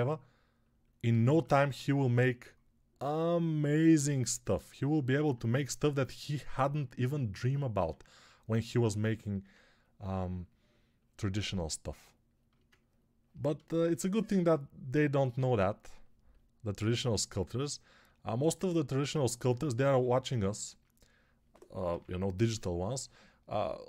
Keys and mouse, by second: 7.7 1, 21.7 p.